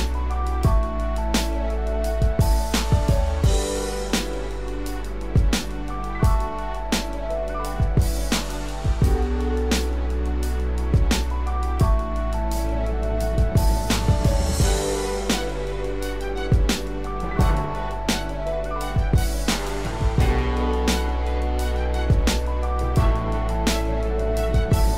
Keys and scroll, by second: 11.2 ctrl+=.